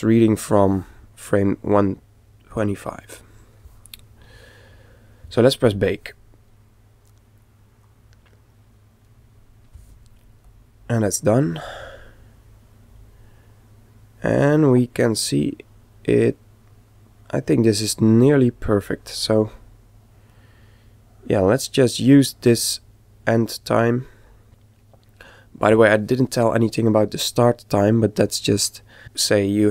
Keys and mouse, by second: 5.7 click, 10.5 click, 24.2 click.